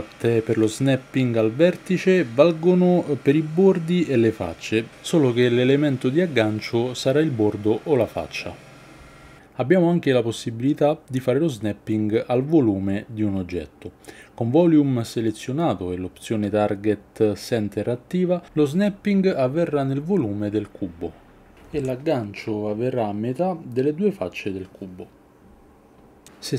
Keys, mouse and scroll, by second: 0.3 g, 3.3-5.5 drag, 6.2 g, 13.6-18.1 drag, 20.1 g, 22.6 Tab, 22.9 middle click, 23.3 shift+middle click, 23.6 shift+click, 23.9 middle click, 24.5 middle click, 25.5 Tab, 25.6 shift+z, 25.9 KP_3.